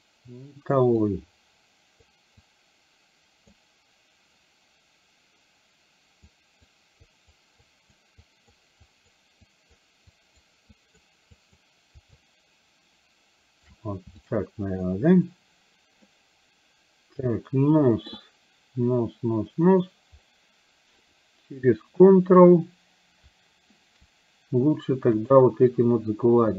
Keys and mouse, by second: 1.2-2.2 drag, 2.6-3.6 drag, 6.3 click, 7.1 click, 7.8 click, 8.3 click, 8.9 click, 9.4 click, 10.2 click, 10.8 click, 11.4 click, 12.2-13.8 shift+drag, 14.3 shift+click, 16.2-18.2 middle drag, 25.3 click.